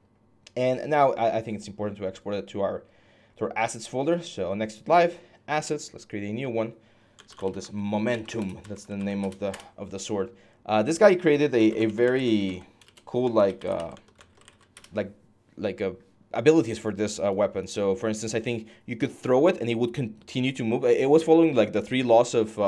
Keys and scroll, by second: 6.8-9.5 typing, 11.2-14.8 typing.